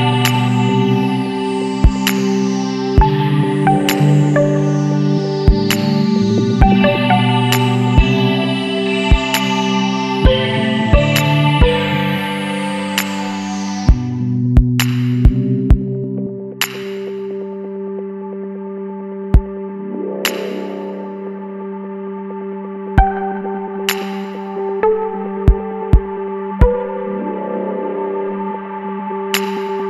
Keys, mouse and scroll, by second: 0.3 click, 1.6 KP_3, 1.9 KP_Enter, 3.8 click, 5.2 click, 6.7 click, 7.8 KP_1, 8.1 KP_8, 8.5 KP_0, 10.3 KP_Enter, 12.0-12.6 scroll up 3, 14.0 click, 15.6 click, 17.4 click, 18.4 click, 19.7 click, 22.2 click, 23.1-23.6 scroll down 1, 25.1 click, 26.3 Delete, 29.3 click.